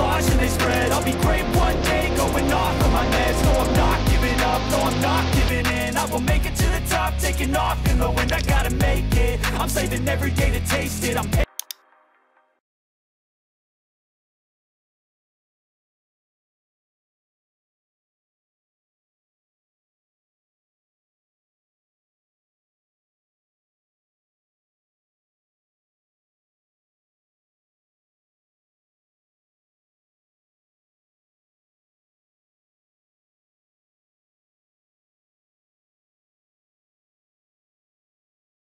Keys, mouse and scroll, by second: 1.9 click, 5.1-6.2 drag, 6.6 Escape, 8.3-9.7 drag, 11.7 click, 14.1 click, 15.1 click, 15.4-16.5 drag, 18.7-21.1 drag, 21.4-22.5 drag, 23.2-24.6 typing, 26.3-27.5 drag, 28.9-29.9 drag, 30.4 click, 31.2 click, 32.4-34.8 typing, 35.2-36.3 drag, 36.8-38.6 drag.